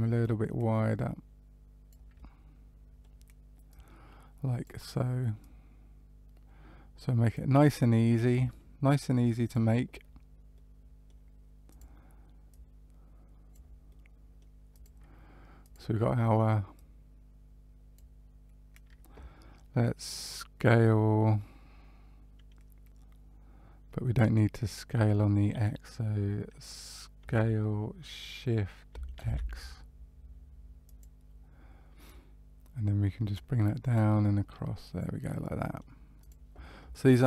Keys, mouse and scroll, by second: 0.1 click, 2.1 middle click, 3.6 click, 5.3 click, 9.4 click, 10.5 middle click, 11.6 click, 12.4 click, 13.8 middle click, 14.7 click, 15.5 click, 16.7 click, 24.3 middle click, 27.2 s, 32.0 click, 33.9 click, 35.2 middle click, 36.1 click.